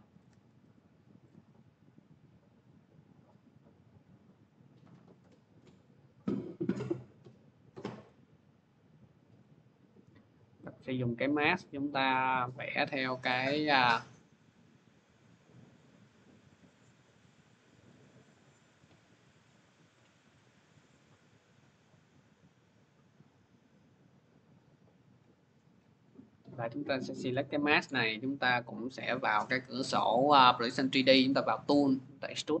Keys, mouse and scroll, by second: 0.1 click, 0.3 ctrl+z, 5.0 shift+click, 7.8 click, 8.3 middle click, 8.9 middle click, 9.3 scroll, 10.6 click, 12.3 click, 12.8 click, 13.3 click, 13.9 click, 14.4 click, 14.8 click, 15.3 click, 16.0 middle click, 16.7 click, 17.1 click, 17.5 click, 18.0 click, 18.4 click, 19.0 click, 19.5 click, 20.0 middle click, 20.7 click, 21.8 click, 22.6 click, 23.4 click, 24.3 click, 24.9 middle click, 26.6 click, 27.1 m, 27.8 click, 29.7 click, 31.1 click, 31.8 click.